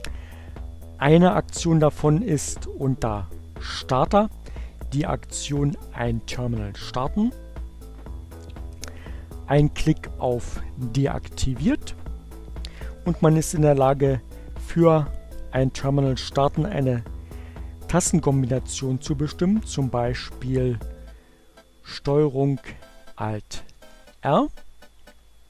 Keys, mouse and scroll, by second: 2.9 click, 8.6 click, 10.9 click, 23.6 ctrl+alt+r.